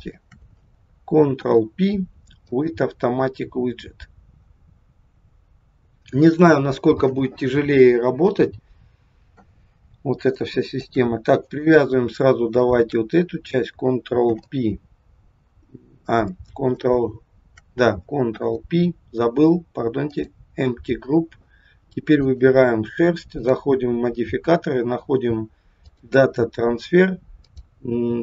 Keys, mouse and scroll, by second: 0.0 shift+click, 1.4 ctrl+p, 9.8-10.1 scroll up 2, 10.4 shift+middle click, 11.3 click, 12.5 shift+click, 14.3 ctrl+p, 18.3 ctrl+p, 22.1 click, 23.4 click, 27.4 click.